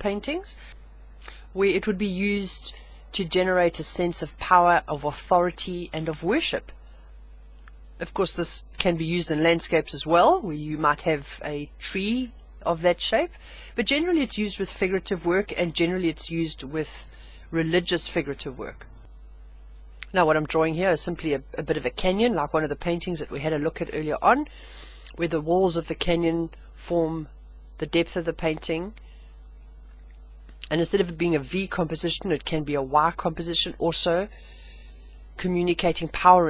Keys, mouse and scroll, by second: 3.1 scroll down 1, 4.2-4.9 scroll down 4, 5.1-5.5 scroll down 2, 28.7 click, 29.0 click, 32.9 click, 33.2 click.